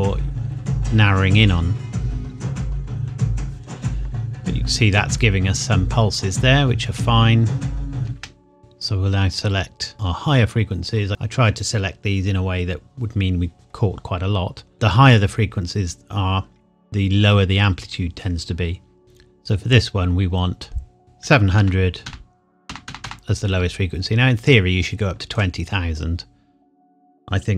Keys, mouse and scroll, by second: 4.9 scroll up 1, 6.6 scroll down 1, 8.0 space, 8.6 click, 9.9 click, 14.7 click, 19.0 click, 21.0 click, 21.2 KP_7, 21.6 KP_0, 24.5 click.